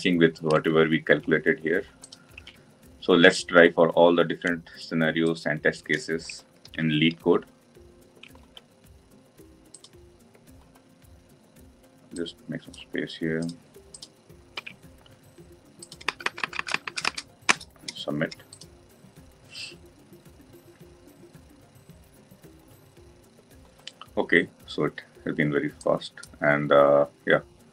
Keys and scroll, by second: 6.5 ctrl+c.